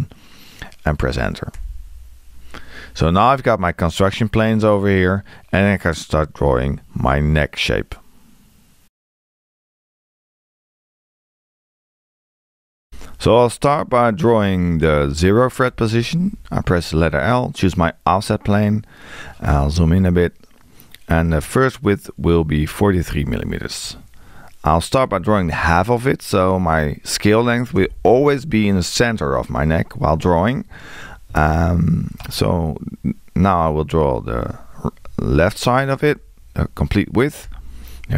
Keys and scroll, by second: 1.6 Return, 15.7 l, 23.8 4, 27.8 Return, 31.0 l, 36.1 4, 36.6 3.